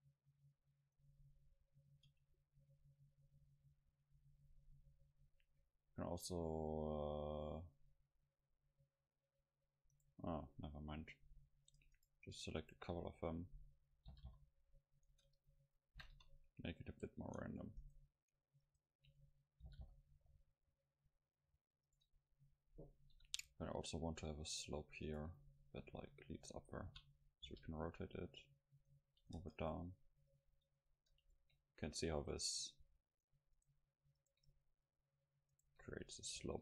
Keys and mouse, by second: 1.0-3.3 drag, 7.7 middle click, 10.0 right click, 10.8-12.3 middle drag, 14.2 g, 14.4 click, 15.2 Tab, 15.2 click, 15.7 middle click, 16.1 KP_0, 16.3 click, 16.3 middle click, 17.3 Tab, 17.9-18.9 right drag, 19.7 g, 22.0 right click, 22.4 middle click, 23.2 KP_Decimal, 24.2 middle click, 25.1 middle click, 25.3 right click, 26.7 click, 26.7 middle click, 26.9 r, 27.5 g, 29.0-31.1 drag, 29.4 Tab, 30.7 Tab, 30.7 Tab, 31.1-33.6 middle drag, 33.2-35.2 drag, 33.6-36.6 right drag, 34.7-36.3 middle drag.